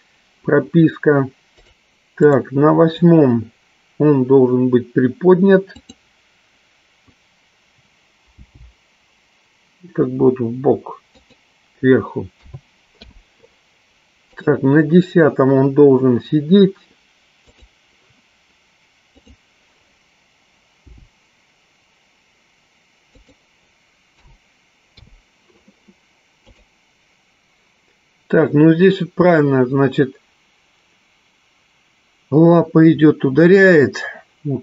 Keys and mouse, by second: 2.7 click, 5.9 click, 8.7 g, 13.3 i, 15.0 click, 18.0 click, 19.4 click, 21.2 g, 25.5 i, 27.1-34.6 drag.